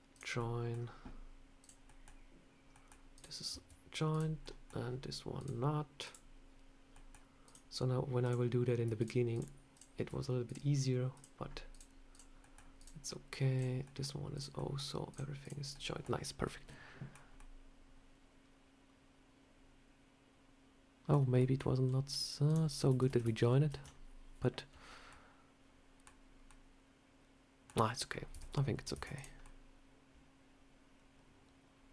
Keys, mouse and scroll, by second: 0.3 middle click, 1.5 click, 1.8 middle click, 2.6 middle click, 3.0 click, 4.0 click, 4.3 middle click, 5.3 click, 5.9 click, 6.8 middle click, 7.3 click, 8.1 click, 8.9 shift+click, 9.0 shift+click, 10.4 shift+click, 11.3 scroll up 1, 11.6 click, 12.0 click, 12.3 middle click, 12.7 click, 13.0 middle click, 13.4 click, 13.7 middle click, 14.2 click, 14.5 middle click, 15.0 click, 15.3 click, 15.6 middle click, 16.3 middle click, 17.3 middle click, 21.3 middle click, 22.4 click, 22.9 ctrl+z, 23.0 ctrl+z, 25.0 ctrl+z, 25.0 middle click, 26.3 scroll up 1, 26.4 middle click, 27.6 scroll down 2, 28.2 Tab, 28.9 Tab, 29.0 click, 29.3 middle click.